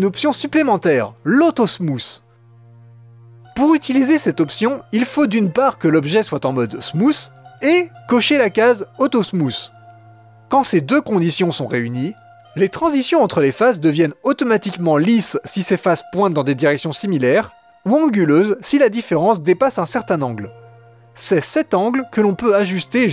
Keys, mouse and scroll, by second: 0.0-0.7 middle drag, 4.0-5.2 right drag, 5.2-7.1 middle drag, 7.1-8.6 right drag, 9.7 click, 10.7-12.2 middle drag, 14.1-14.4 scroll up 1, 14.4 Tab, 15.0 click, 15.6 g, 16.7 g, 18.3 middle click, 18.8 g, 20.1-21.2 middle drag, 21.2 click, 21.4 g, 22.3 Tab, 22.8-23.1 middle drag.